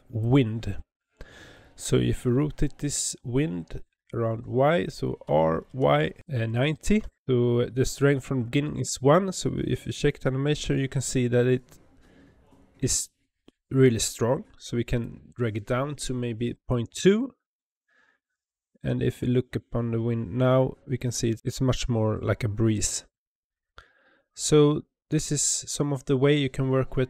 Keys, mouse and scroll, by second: 5.2 r, 8.7 space, 14.8-17.9 drag.